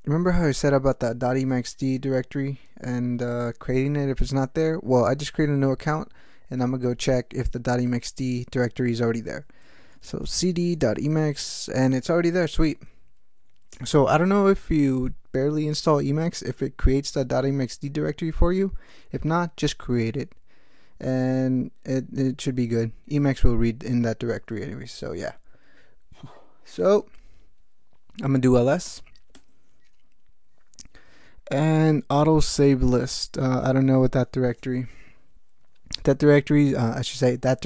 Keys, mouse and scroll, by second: 5.9 ctrl+alt+t, 7.9 click, 9.7-11.3 typing, 13.7 Return, 28.5-29.3 typing.